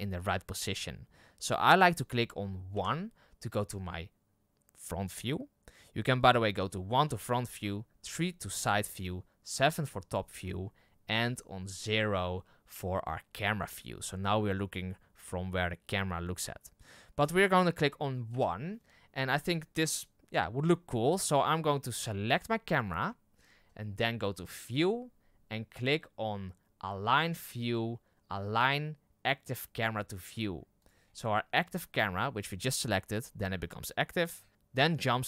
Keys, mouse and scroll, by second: 2.7 KP_1, 6.9 KP_1, 8.0 KP_3, 9.4 KP_7, 11.7 KP_0, 18.3 KP_1, 22.3-27.5 right drag.